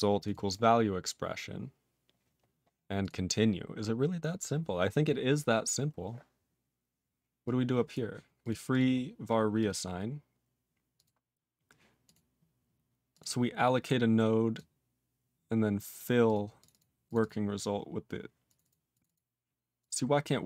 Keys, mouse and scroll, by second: 0.2 click, 0.2 click, 1.7-2.5 scroll up 1, 2.9 click, 3.0 click, 5.0 scroll, 5.1 scroll up 3, 5.8-7.2 scroll up 9, 7.4 click, 7.9 click, 8.3 click, 8.4 click, 8.6 click, 8.7 click, 9.5 click, 9.6 click, 10.9 click, 11.0 click, 12.0 click, 12.1 click, 13.1 click, 13.1 click, 14.5 click, 15.9 click, 16.2 click, 16.3 click, 16.5 click, 16.6 click, 16.6 double click, 16.7 double click, 17.0 click, 17.2 double click, 17.7 double click, 18.4 click, 18.5 click, 18.6 double click, 18.6 double click, 18.9 click, 18.9 click, 19.0 double click, 19.1 double click, 19.7 click, 19.8 click.